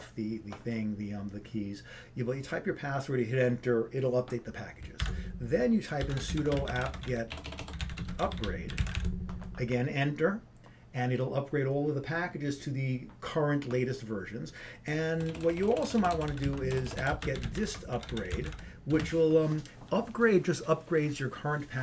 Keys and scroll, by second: 6.6 ctrl+c, 6.6-8.4 typing, 10.0 typing, 17.1 typing, 18.3-19.0 typing.